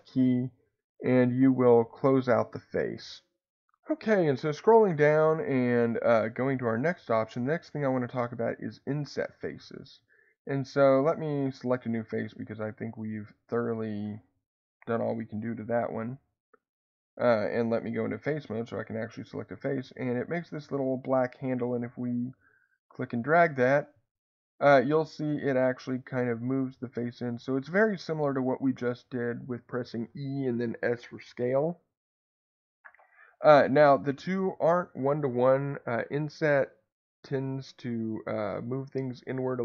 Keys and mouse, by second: 12.7 middle click, 14.6 click, 18.1 click, 20.1 middle click, 22.8-33.6 drag.